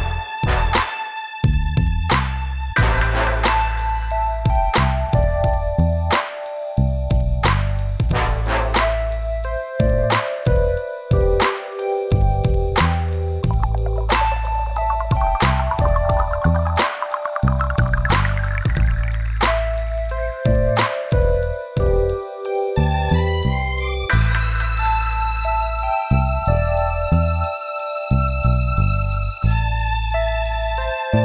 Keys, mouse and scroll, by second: 0.5 click, 1.3 click, 1.7 click, 2.3 click, 4.4 click, 8.1 middle click, 9.8 click, 11.3 click, 11.9 click, 14.6 click, 15.9 click, 16.7 click, 17.4 click, 17.9 click, 18.0 click, 18.3 click, 18.9 click, 20.5 click, 21.5 click, 24.4 scroll down 2, 26.0 click, 26.5 click.